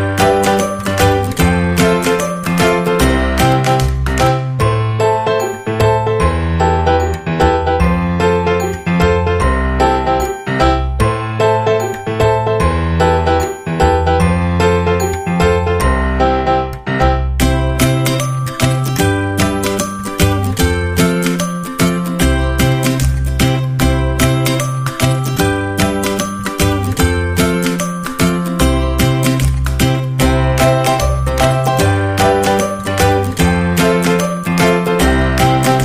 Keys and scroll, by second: 34.4 -.